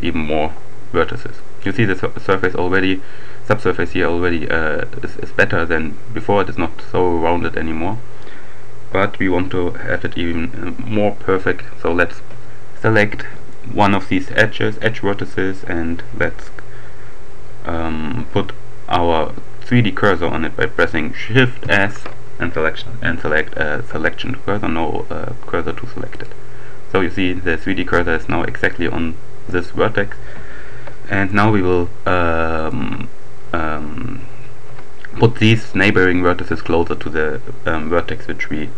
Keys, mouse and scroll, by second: 13.4 right click, 21.6 shift+s, 26.1 click, 31.2 right click, 32.6 shift+right click.